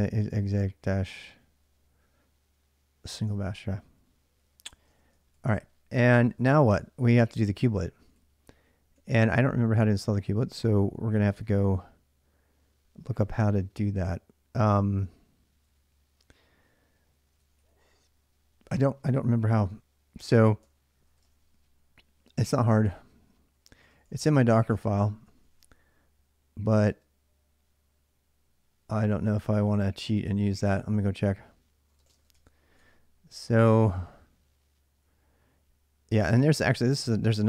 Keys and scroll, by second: 0.7 j, 1.2 j, 3.1 ctrl+[, 3.3-5.9 typing, 7.8 ctrl+a, 8.0 ctrl+a, 15.7 ctrl+a, 17.2 ctrl+a, 17.4 ctrl+a, 20.1 ctrl+a, 20.2-21.5 typing, 23.2-27.1 typing, 29.6-32.6 typing, 34.7 typing, 36.0-37.4 typing.